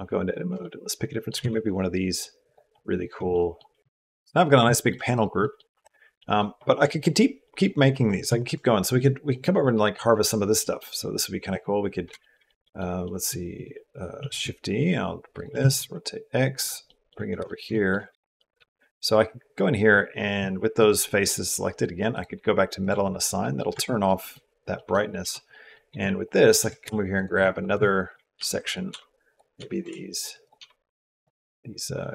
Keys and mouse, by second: 0.4 shift+middle click, 1.2 g, 3.1 shift+middle click, 3.2 shift+click, 3.4 shift+click, 3.8 shift+middle click, 4.5 shift+middle click, 4.9 click, 5.2 middle click, 5.6 click, 6.0 click, 6.1 middle click, 7.2 middle click, 8.1 shift+middle click, 8.6 middle click, 8.8 shift+middle click, 10.2 middle click, 12.0 shift+middle click, 12.3 middle click, 13.0 click, 14.0 shift+d, 15.1 click, 15.4 r, 16.7 middle click, 17.2 shift+middle click, 17.5 middle click, 18.0 shift+middle click, 18.4 g, 18.7 ctrl+z, 18.7 Tab, 18.7 s, 21.9 click, 22.6 click, 23.2 click, 23.5 Tab, 23.9 click, 24.6 click, 25.0 Tab, 25.3 click, 26.6 g, 27.9 shift+middle click, 28.2 s, 28.7 g, 29.4 s, 30.4 g.